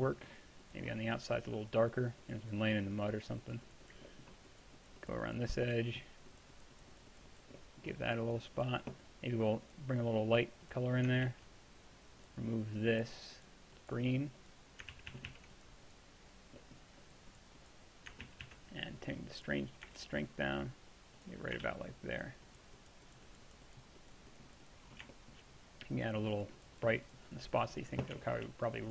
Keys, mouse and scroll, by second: 0.1-2.9 middle drag, 4.1-6.1 middle drag, 7.6-11.3 middle drag, 11.3 ctrl+z, 15.0 ctrl+z, 15.2 ctrl+z, 15.3 ctrl+z, 16.6-20.0 drag, 18.3 ctrl+z, 18.5 ctrl+z, 20.0 shift+f, 21.0 middle click, 21.7 shift+f.